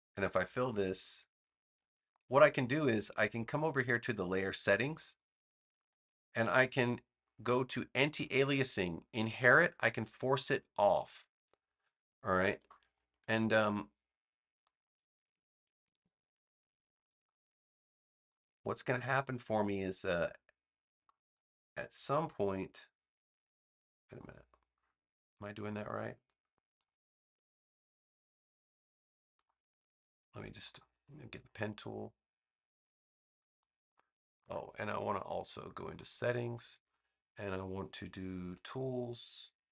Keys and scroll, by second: 15.9 super+=.